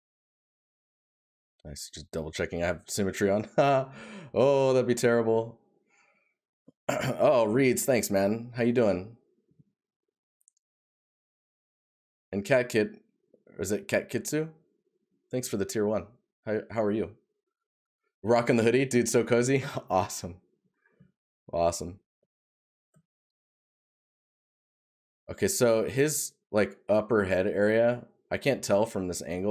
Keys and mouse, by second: 0.0 right click, 3.4 right click, 19.4 right click, 24.1 right click.